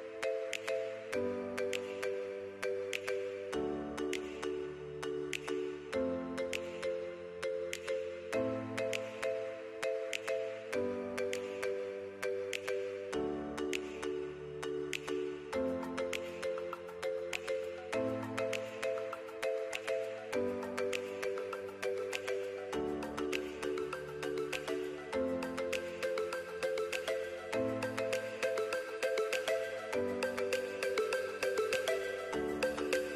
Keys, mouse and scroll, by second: 2.4 click, 6.5 click, 10.8 click, 13.2 click, 20.1 click, 24.4 click.